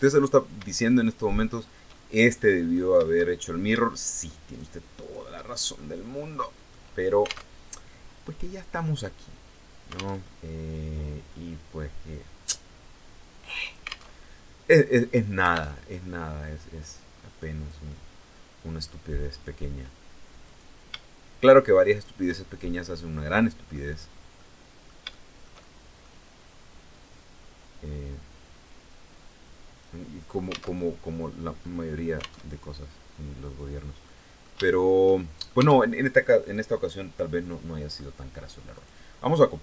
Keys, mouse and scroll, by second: 0.3 shift+right click, 0.8 shift+right click, 1.4-2.5 shift+middle drag, 2.8 shift+middle click, 4.0 shift+right click, 4.6 shift+right click, 5.1 shift+scroll down 1, 5.3-6.4 shift+middle drag, 7.0 alt+Tab, 9.8 alt+Tab, 10.8-13.7 drag, 13.7 alt+Tab, 15.4 alt+Tab, 16.1-17.6 drag, 17.6 scroll up 2, 18.7 scroll up 2, 20.0 right click, 21.4 shift+right click, 22.0 shift+scroll down 2, 22.3-23.5 shift+middle drag, 23.6 scroll up 2, 24.0 middle click, 24.7-25.8 shift+middle drag, 26.5-29.6 drag, 29.7-30.0 scroll down 2, 30.4 alt+Tab, 32.0 alt+Tab, 32.6 scroll down 2, 33.6-35.2 middle drag, 35.2 shift+Tab, 35.6 shift+scroll down 3, 36.1-37.7 middle drag, 38.3 right click.